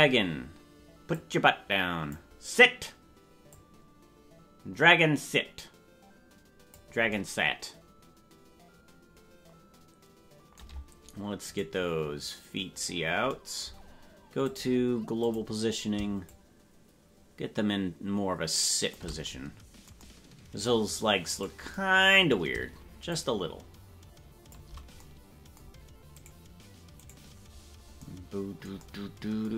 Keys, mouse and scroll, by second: 1.1-2.7 drag, 3.5-6.8 drag, 11.8-13.3 right drag, 14.4-15.4 drag, 16.2-19.5 shift+drag, 21.6 right click, 23.1-25.1 shift+drag, 26.3 right click, 28.0 right click.